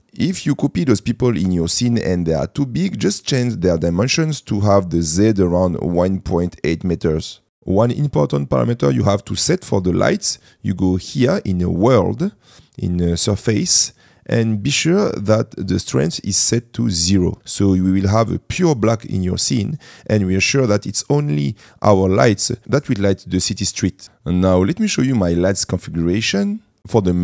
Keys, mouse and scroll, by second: 0.0 middle click, 0.7-3.0 middle drag, 8.0 middle click, 10.1 shift+middle click.